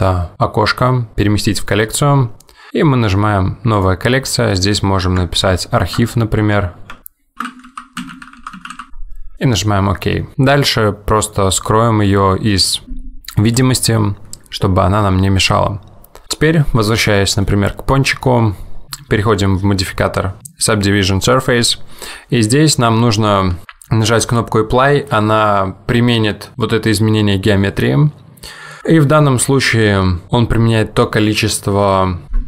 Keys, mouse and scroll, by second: 13.5 click, 17.6 middle click, 18.3 scroll up 1, 20.4 click.